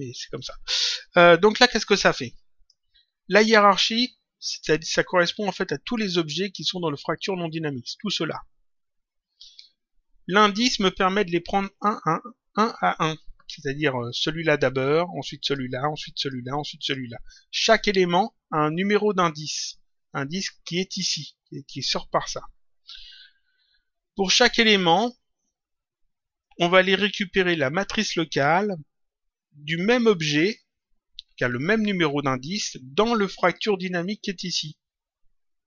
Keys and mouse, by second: 1.8 click, 14.0 click, 15.3 click, 19.2 click, 30.3 click.